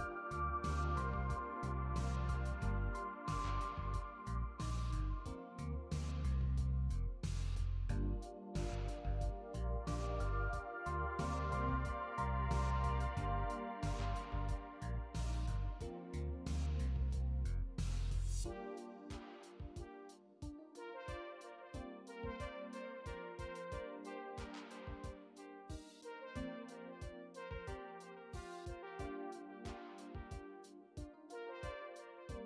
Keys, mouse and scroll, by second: 0.4 middle click, 0.4 scroll up 1, 3.2 scroll down 3, 3.8 scroll up 1, 3.9 middle click, 5.8 click, 6.5 middle click, 6.9 scroll down 2, 7.4 middle click, 9.2 click, 11.5 click, 13.3 click, 14.1-16.5 scroll up 7, 16.5 click, 23.1 click, 26.6 click.